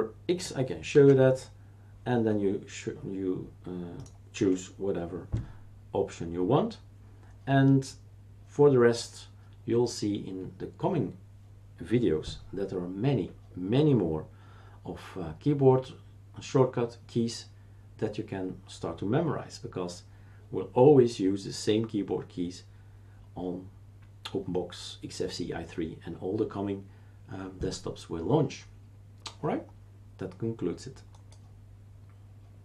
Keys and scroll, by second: 0.9 super+x, 4.4 Escape.